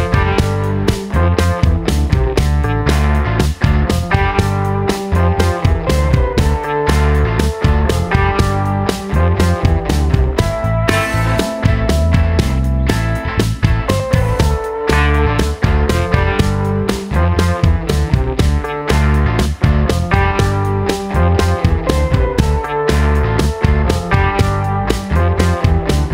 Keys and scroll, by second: 6.8 super+z, 18.3 i.